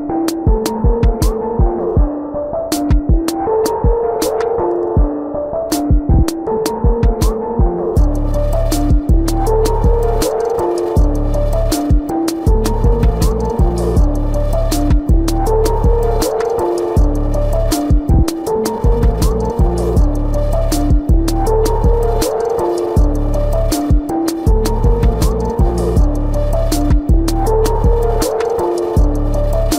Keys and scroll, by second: 0.8 space, 1.7 space, 3.1 space, 3.5 space, 4.0 space, 5.1 space, 6.5 space, 9.3 ctrl+alt+z, 12.8 space, 14.9 space, 17.6 space, 17.8 ctrl+-, 18.1 ctrl+=, 20.9 space, 21.8 space, 24.2 space, 26.3 ctrl+=, 26.7 space, 28.1 ctrl+=, 28.4-29.7 typing, 28.6 ctrl+-.